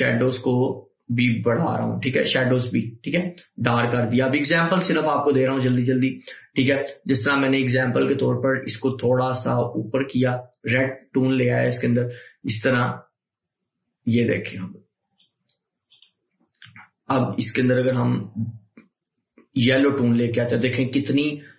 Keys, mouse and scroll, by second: 8.9 click, 9.1-21.5 drag.